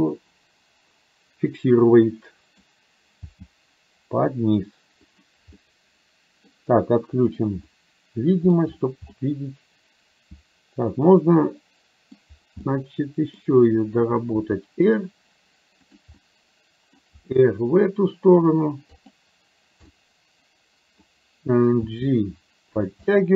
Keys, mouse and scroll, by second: 3.4 g, 5.6-6.4 scroll up 1, 6.4 middle click, 7.3 click, 7.8 middle click, 8.6-9.1 scroll down 1, 9.1-12.3 middle drag, 12.6 middle click, 14.5 r, 16.1-17.1 middle drag, 17.1 r, 20.0-21.0 middle drag, 21.9 g, 23.1-23.3 middle drag.